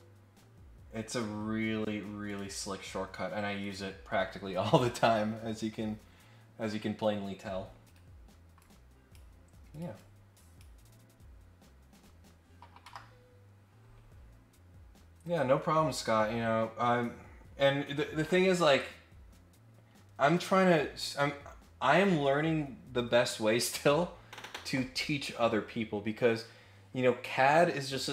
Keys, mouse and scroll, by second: 2.2 click, 3.6 click, 4.0 Escape, 7.8 Escape, 8.1-8.6 scroll down 2, 8.6 click, 9.7 click, 9.9 click, 12.8 Delete, 14.3-14.8 scroll down 2, 14.8-15.2 scroll up 2, 16.0 scroll up 2.